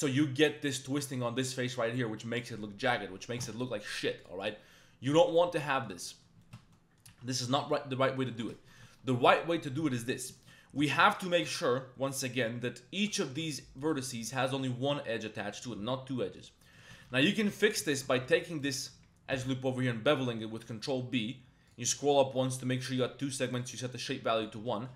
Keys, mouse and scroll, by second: 0.4 click, 1.4 middle click, 3.4 Tab, 4.2 click, 4.5-5.2 drag, 5.6 drag, 6.0 drag, 6.4 shift+drag, 6.6 Tab, 6.7 click, 7.1 2, 7.6 shift+middle click, 8.0 middle click, 8.3 Tab, 8.6 shift+click, 8.8 Tab, 10.4 shift+middle click, 10.8 shift+click, 11.4 1, 12.9 2, 13.3 1, 13.8 click, 16.7 shift+click, 16.9 2, 17.3 alt+click, 17.9 alt+shift+click, 18.5 alt+shift+click, 19.3 ctrl+b, 21.7 click, 23.7 click, 24.8 shift+click.